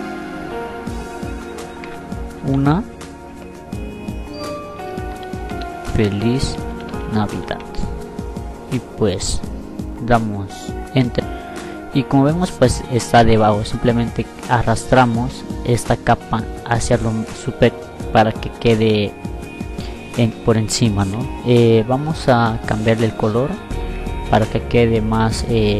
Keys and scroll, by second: 0.6 a, 3.5-6.1 typing, 7.0 F9.